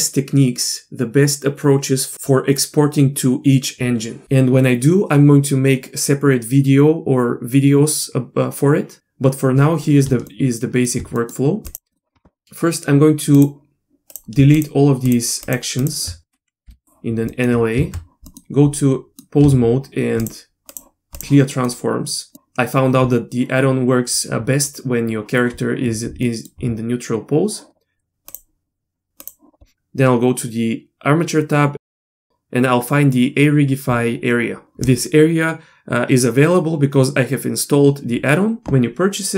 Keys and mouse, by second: 10.3-10.9 shift+middle drag, 11.2 middle click, 11.9 middle click, 13.4 click, 14.1 click, 14.5 shift+click, 15.0 shift+click, 15.5 shift+drag, 15.8 shift+click, 16.7 Delete, 17.3 middle click, 18.0 Tab, 18.3 middle click, 19.1 middle click, 19.4 a, 20.2-21.2 drag, 21.5 middle click, 26.3 middle click, 29.2 click.